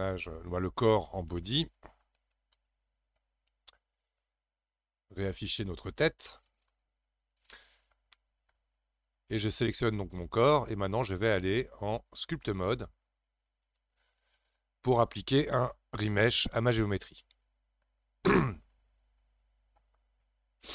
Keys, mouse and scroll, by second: 0.0-3.0 drag, 5.9 click, 6.7 click, 7.2 scroll up 3, 7.5-9.3 middle drag, 9.3 click, 11.5-14.5 drag.